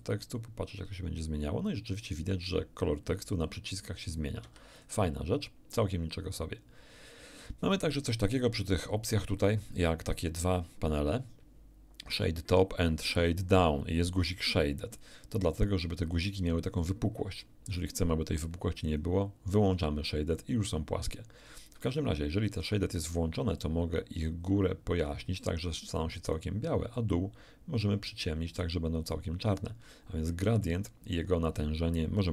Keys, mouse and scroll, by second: 4.4 Escape, 18.9 click, 22.5 click, 23.6-26.5 drag, 26.9-28.7 drag.